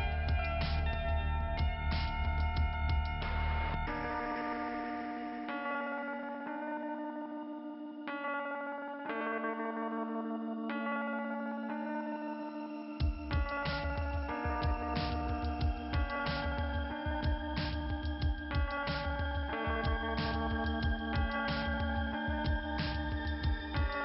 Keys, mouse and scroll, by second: 0.1 click, 0.7 scroll up 2, 1.3 click, 1.8 scroll down 1, 2.5 click, 6.5 click, 7.8 click, 17.1 click, 18.4 click, 18.6 click, 20.3 click, 21.7 click, 23.6 scroll down 2.